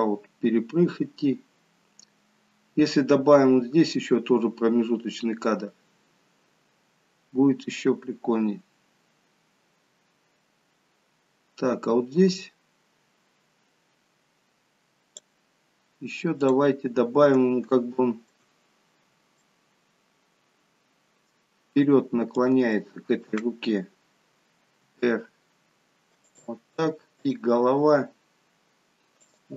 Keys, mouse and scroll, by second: 16.4 click, 16.8-17.5 scroll up 2, 17.6 shift+middle click, 19.3 middle click, 22.3 click, 24.8 middle click, 24.8 r, 27.1 click, 27.8 r.